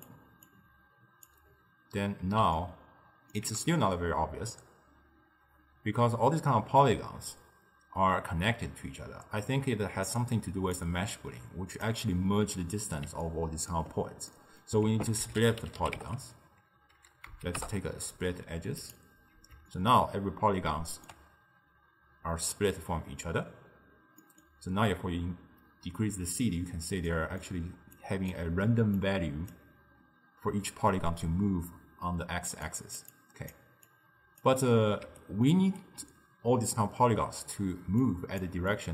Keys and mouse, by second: 0.5 drag, 2.6-5.7 ctrl+middle drag, 9.4-10.8 middle drag, 10.8 click, 13.3-14.9 ctrl+middle drag, 14.9 ctrl+a, 19.8-22.8 ctrl+middle drag, 24.3 middle click, 24.9-27.2 drag, 27.2 middle click, 28.0 click, 29.0 click, 32.7 d, 32.7 click, 33.6 d, 34.0 click, 34.5-35.1 d, 35.2 right click, 35.9 d, 37.9 d, 38.1-38.5 drag, 38.5-38.9 d, 38.8-38.9 drag.